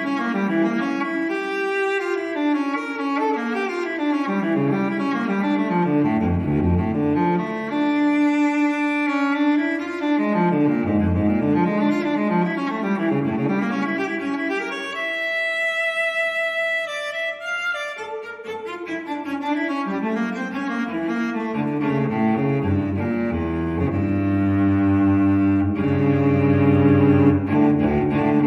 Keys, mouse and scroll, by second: 0.6 click, 3.2-4.1 drag, 4.6 1, 7.1 click, 8.3 click, 11.1 click, 11.7-13.8 typing, 14.8 click, 15.7 click, 18.0 click, 18.8-19.2 scroll down 1, 19.7 scroll up 2, 21.1 click, 23.0 click, 24.0-24.9 typing, 25.7 click.